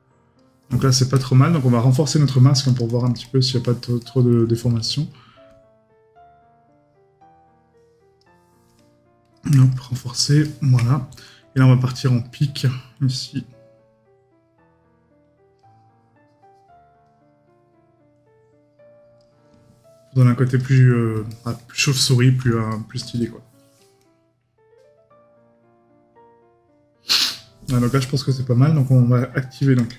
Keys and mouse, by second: 4.0 right click, 10.4 right click, 11.9 right click, 21.3 right click.